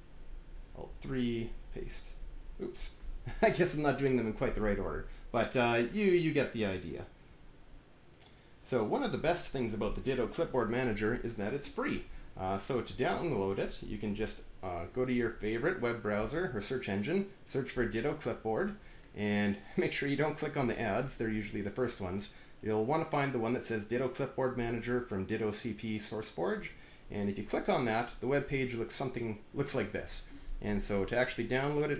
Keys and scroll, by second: 0.5 alt+`, 0.9 alt+3, 1.6 ctrl+v, 2.8 alt+`, 7.6 alt+5.